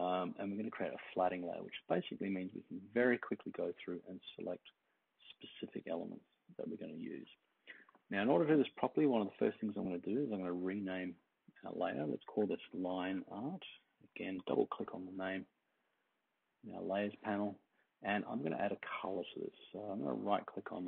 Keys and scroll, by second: 12.1-14.7 typing.